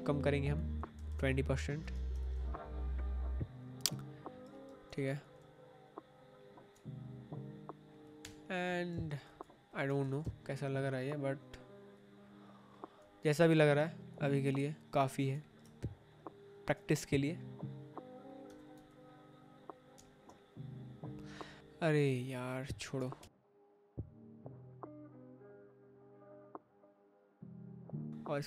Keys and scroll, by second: 0.6-1.8 typing, 4.8 ctrl+t, 8.1 Return, 8.8 space, 9.8 1, 10.0 0, 10.2 Return, 14.6 ctrl+t, 18.4 Escape, 19.8 space, 21.5 ctrl+t, 23.1 Return, 24.8 ctrl+t, 26.3 Return, 28.3 space.